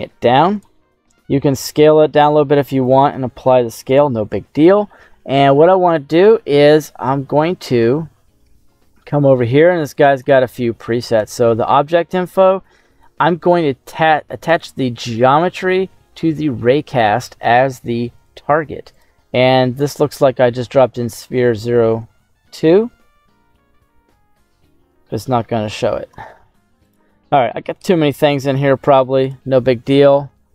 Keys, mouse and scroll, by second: 0.5 click, 0.8 s, 1.8 click, 2.3 ctrl+a, 3.2 scroll down 1, 3.2 middle click, 3.8 right click, 4.8 middle click, 5.4-6.3 scroll up 2, 7.8 middle click, 9.7 click, 9.7 scroll down 1, 10.6 middle click, 14.3-16.9 drag, 18.9-29.2 drag.